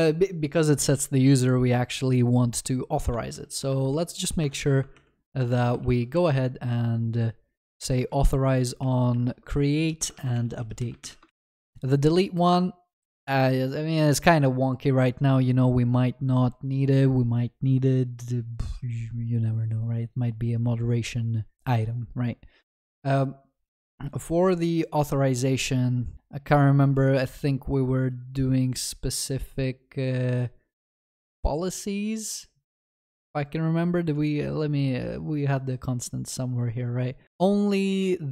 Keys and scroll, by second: 4.4 Return, 8.1 ctrl+x, 8.8 ctrl+z, 10.3 ctrl+s, 11.2 ctrl+y, 33.3 ctrl+alt+Left.